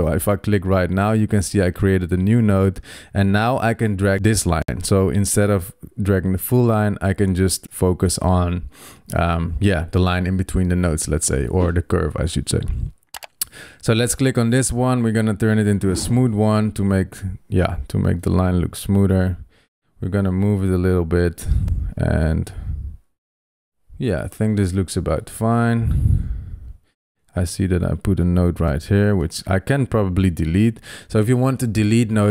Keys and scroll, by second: 26.8 super+z.